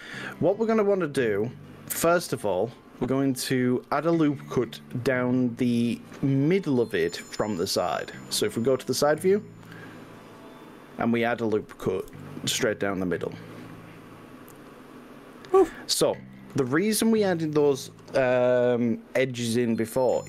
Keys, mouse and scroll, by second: 6.0-8.0 middle drag, 8.7 middle click, 9.7 KP_3, 12.0 ctrl+r, 16.4 right click.